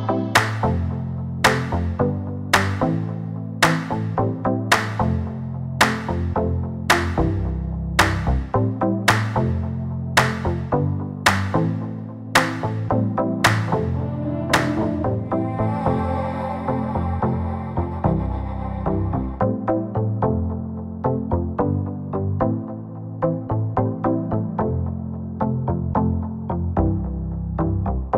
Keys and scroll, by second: 10.3 4, 10.5 5, 11.1 Return, 14.8 -, 15.1 4, 15.3 5, 15.6 Return.